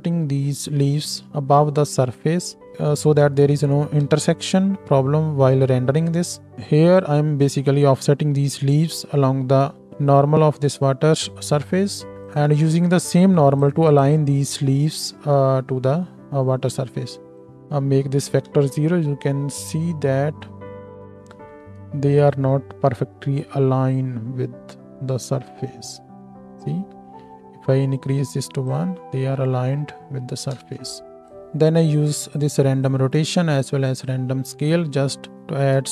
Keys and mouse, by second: 4.0 KP_0, 12.3-17.3 drag, 13.0-13.9 middle drag, 13.0-13.9 right drag, 18.5 KP_0, 22.4-32.3 middle drag, 30.5 KP_0, 32.3 click, 32.9-34.0 middle drag, 34.0-35.9 drag.